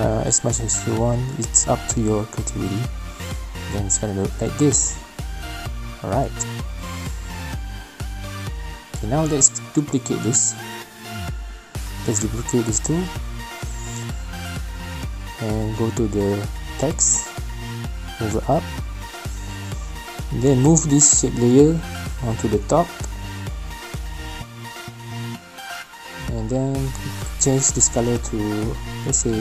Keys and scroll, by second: 4.4 space, 6.0 space, 14.8 ctrl+c, 14.9 ctrl+v.